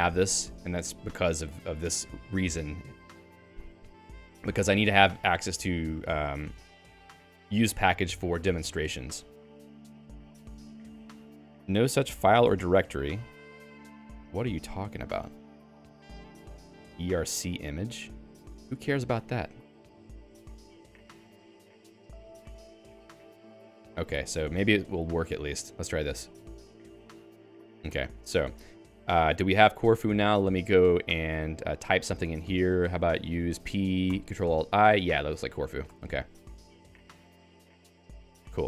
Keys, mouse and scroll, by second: 13.0 End, 15.7 middle click, 19.1 Home, 19.3 Home, 20.5 q, 21.7 Right, 22.4-27.0 typing, 23.7 ctrl+g, 24.1 Escape, 27.0 ctrl+e, 27.9 Escape, 29.2-34.0 typing, 34.3 ctrl+alt+i, 35.0 ctrl+j, 35.4 ctrl+j, 35.8 BackSpace, 36.0 BackSpace, 36.9 ctrl+alt+i, 37.7 Down, 38.0 Down, 38.1 Down, 38.3 Down, 38.5-38.6 Down.